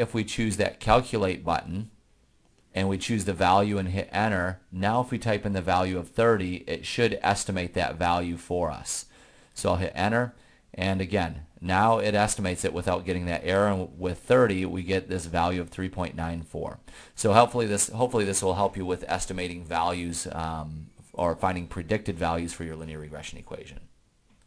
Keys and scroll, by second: 3.9 Return, 6.0 3, 7.6 0, 9.7 Return.